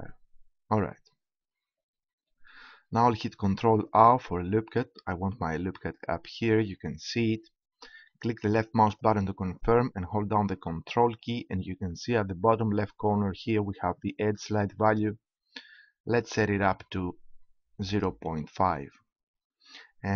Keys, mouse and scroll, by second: 4.2 ctrl+r, 18.6-19.8 drag.